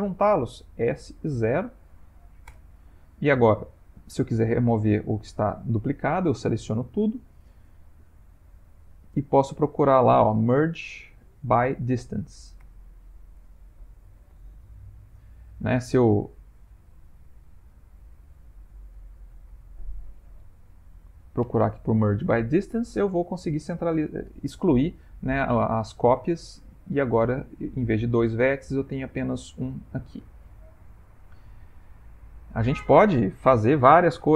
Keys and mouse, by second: 0.8 s, 6.3 a, 8.8 F3, 14.4 middle click, 15.7 F3, 19.5 BackSpace, 25.5 middle click, 25.6 middle click, 26.8 ctrl+middle click, 29.4 middle click, 31.0 shift+middle click.